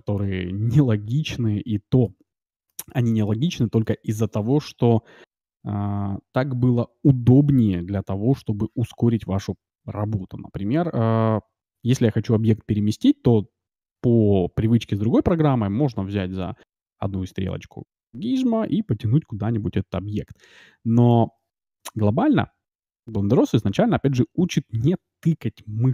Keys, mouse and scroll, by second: 5.3 middle click, 17.4-19.4 drag.